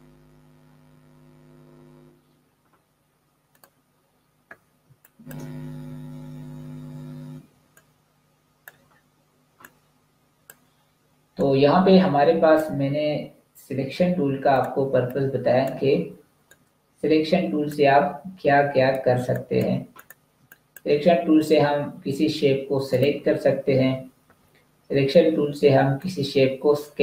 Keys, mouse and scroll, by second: 3.4 click, 4.6 space, 4.8 click, 7.3 space, 7.7 click, 7.9 space, 9.5 click, 14.7 space, 14.9 click, 15.3 space, 16.3 click, 19.0 space, 19.2 click, 19.6 space, 20.0 click, 20.2 space, 20.4 click, 25.8 click.